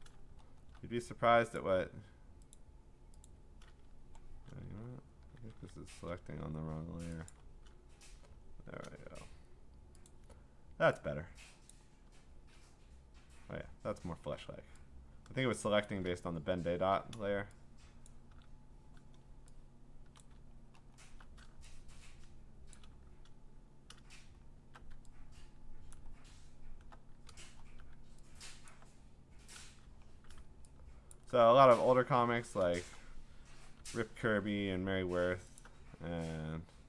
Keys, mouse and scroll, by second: 0.4-1.0 scroll, 1.6 alt+click, 2.5 click, 3.3 click, 3.9 alt+click, 4.0 Escape, 4.9 ctrl+scroll down 3, 5.4 scroll, 5.5 ctrl+d, 6.4-7.3 scroll, 7.3 click, 7.9-9.4 scroll, 10.1 click, 11.7 click, 13.6-15.5 scroll, 15.8 shift+click, 18.1 shift+click, 20.7-21.7 scroll, 21.7-22.4 scroll, 22.4 click, 22.7 shift+click, 24.2 alt+scroll, 25.9 click, 27.3 scroll, 28.7 click, 31.1 alt+click, 32.7-33.7 scroll, 34.5 alt+click.